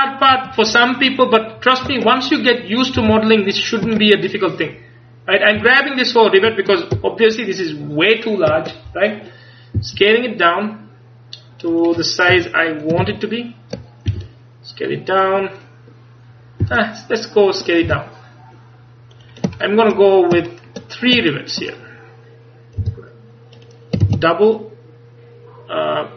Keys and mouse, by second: 0.8 ctrl+KP_Add, 1.3-2.9 ctrl+KP_Add, 3.1 g, 5.6 a, 6.1-8.8 right drag, 7.0 ctrl+KP_Add, 7.5-8.8 ctrl+KP_Add, 9.8 s, 12.4 KP_1, 13.1 ctrl+KP_1, 14.2 s, 16.7 s, 17.7-20.2 drag, 17.9 g, 22.9 click, 22.9 g, 23.7-25.6 drag, 24.1 shift+d.